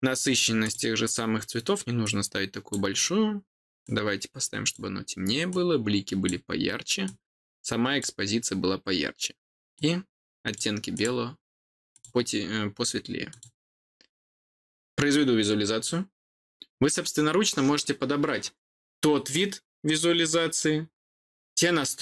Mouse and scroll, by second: 0.6 click, 2.0 click, 3.8 click, 5.4 click, 7.0 click, 9.7 click, 10.9 click, 11.9 click, 13.2 click.